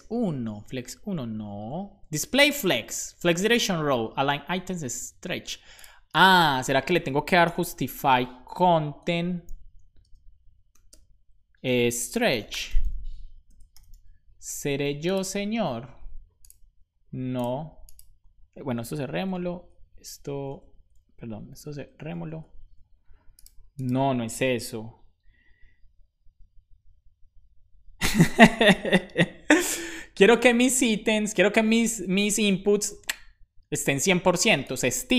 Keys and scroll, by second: 6.8 Return, 7.5 u, 8.8 Return, 9.9 space, 11.7-13.6 typing, 13.8 super+s, 16.5 super+s, 18.9 ctrl+c, 19.5 super+Right, 20.4 super+Left, 21.4 ctrl+x, 22.3 super+Right.